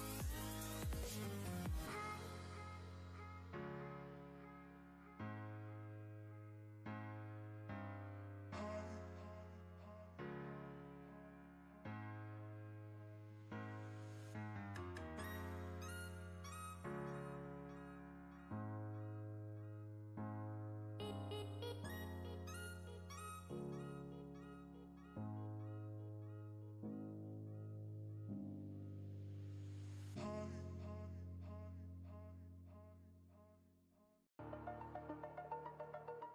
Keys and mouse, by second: 0.0-0.7 click, 0.4 space, 2.1 alt+click, 3.5 ctrl+z, 3.9 ctrl+space, 4.0-4.7 ctrl+drag, 5.3-6.2 alt+drag, 7.9 ctrl+space, 8.1-8.7 ctrl+click, 8.4 ctrl+space, 8.7-9.5 click, 9.1 space, 11.0-12.2 drag, 12.6-13.2 ctrl+click, 14.0-18.1 drag, 18.3 ctrl+space, 18.4-21.9 ctrl+click, 18.8 ctrl+space, 19.8 ctrl+space, 23.0-24.2 drag, 27.6 ctrl+space, 27.7-28.7 ctrl+click, 28.1 ctrl+space, 28.3 ctrl+space, 28.9 ctrl+space, 29.2-30.2 ctrl+click, 29.4 ctrl+space, 30.3 space, 30.5-31.3 click, 30.9 space, 33.8 right click, 34.9-36.3 drag.